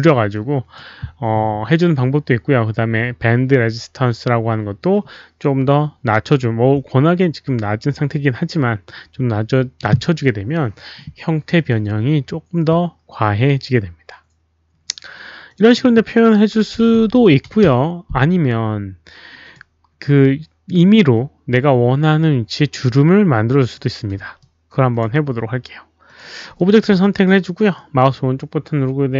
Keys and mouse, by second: 0.3-0.7 drag, 3.7 click, 15.5 click, 15.7 click, 16.6 KP_1, 16.7 KP_0, 16.9 Tab, 17.2 KP_Decimal, 19.4 Return, 19.4 Tab, 19.4-20.2 typing, 19.4 click, 20.2 Return, 20.2 Tab, 20.2 alt+click, 23.7 alt+click, 24.3 alt+click, 26.0 click, 26.5 alt+click, 26.8 alt+click, 27.7-29.1 right drag, 28.2 Return, 28.2 alt+click.